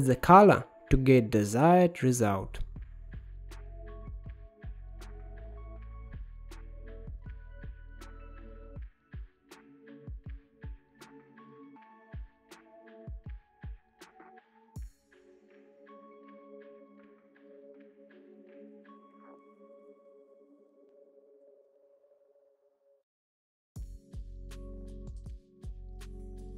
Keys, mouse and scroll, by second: 1.1-4.8 drag, 5.4-8.4 drag, 8.6-10.1 drag, 10.1-11.3 drag, 14.4-17.1 drag, 17.9-20.0 drag, 22.0 click, 22.2-23.7 middle drag, 23.7-26.1 drag.